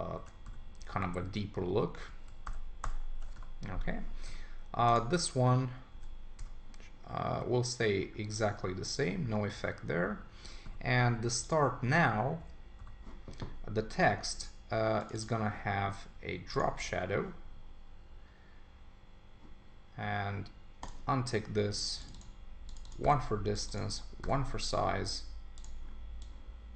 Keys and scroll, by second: 0.2 super+1, 2.4 super+=, 5.9 ↺, 12.4 ↺.